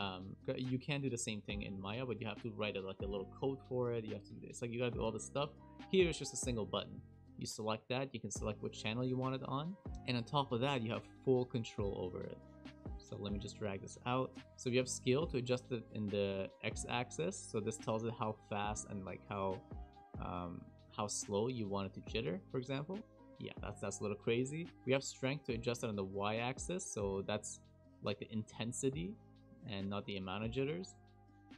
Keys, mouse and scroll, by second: 13.4 click, 15.2 click, 23.0 Left, 23.0 space, 23.5 space, 25.5 click, 29.7 click, 30.1 click, 30.8 space.